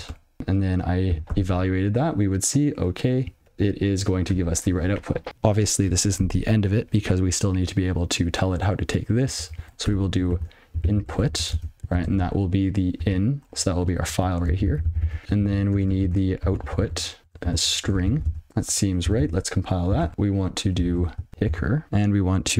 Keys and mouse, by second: 0.4 ctrl+e, 1.3 ctrl+e, 2.3 click, 2.6 click, 2.8 click, 3.4 ctrl+e, 9.7 ctrl+a, 10.5-11.9 typing, 12.6 ctrl+f, 15.2 ctrl+n, 15.7 ctrl+b, 16.1-18.6 typing, 19.2 ctrl+c, 20.1 Return, 21.3 (, 21.8 space.